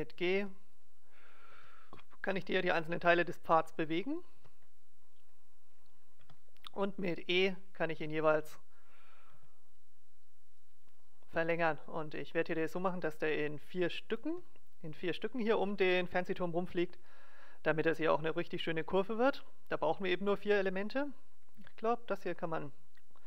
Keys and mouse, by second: 0.3 g, 1.5 g, 2.9 g, 4.3 g, 5.9-7.1 right drag, 6.2 e, 7.1 middle click, 7.9 e, 9.3 e, 12.7-15.9 right drag, 12.9 g, 14.2 click, 14.3 g, 15.7 click, 20.9-22.7 right drag, 21.5 x.